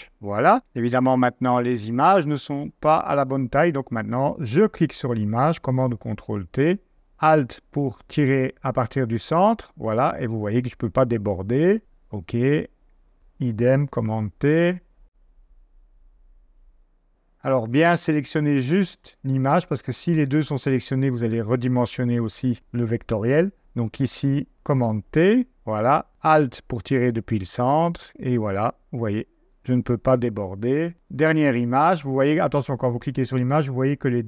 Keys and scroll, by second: 5.8 super+t, 6.9 super+z, 13.9 super+t, 16.6 super+z, 25.1 super+t.